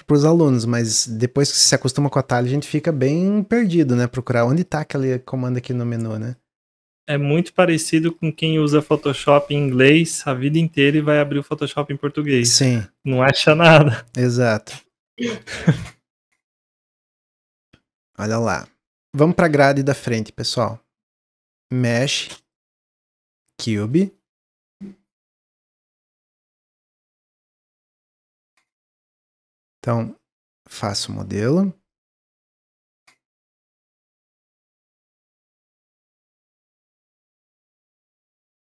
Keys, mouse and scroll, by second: 4.6-6.3 drag, 7.3 click, 7.7-8.3 right drag, 8.3-8.7 drag, 8.7-9.1 middle drag, 9.1 drag, 9.4-9.8 middle drag, 9.8 click, 10.7 shift+d, 12.8 middle drag, 13.0 click, 13.4 middle click, 13.8 scroll down 1, 14.0-16.3 middle drag, 16.3 click, 16.6-20.5 middle drag, 20.5-21.7 drag, 22.1 click, 22.3-23.9 drag, 23.9-24.7 middle drag, 24.7 click, 25.9 click, 26.8 s, 29.3-30.5 drag, 31.9 click, 32.8-33.7 middle drag, 33.7 click, 34.9 click, 35.1-36.7 middle drag, 36.7 click, 37.6-38.7 middle drag.